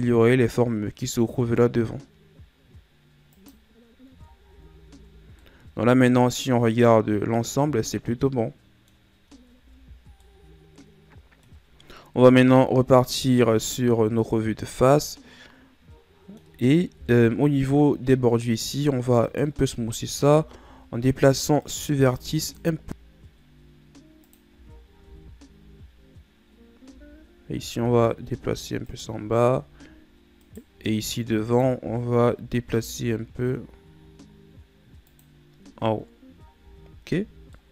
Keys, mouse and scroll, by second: 4.2 Tab, 4.5 a, 4.9 a, 5.2 scroll down 2, 5.4-8.5 middle drag, 9.7 ctrl+s, 10.2-12.3 middle drag, 12.3 KP_1, 14.5 scroll up 2, 15.1-17.0 middle drag, 17.0 KP_1, 18.2-18.5 scroll down 1, 18.5-19.2 scroll up 2, 19.2 right click, 19.7 Tab, 20.4 z, 20.8 scroll up 2, 21.6 right click, 22.0 b, 25.0 Tab, 25.7-26.6 scroll down 2, 26.6 scroll up 1, 26.9 Tab, 27.7 g, 30.4 right click, 30.7 b, 35.7 Tab, 36.6 z, 36.9-37.2 scroll down 2, 37.2 z, 37.5-37.7 middle drag.